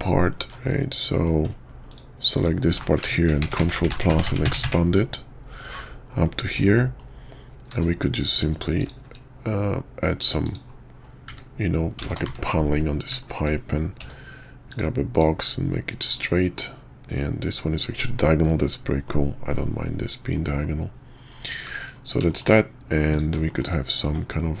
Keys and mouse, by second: 0.4 ctrl+z, 1.1 click, 1.9 alt+click, 2.3 alt+click, 3.4 ctrl+KP_Add, 6.7 click, 7.7 q, 12.6 KP_5, 13.2 shift+middle click, 14.0 d, 15.2-16.2 drag, 19.0 middle click, 20.3 middle click, 22.3 shift+middle drag, 23.1 click, 23.5 shift+middle click, 24.0 Tab, 24.5 middle click.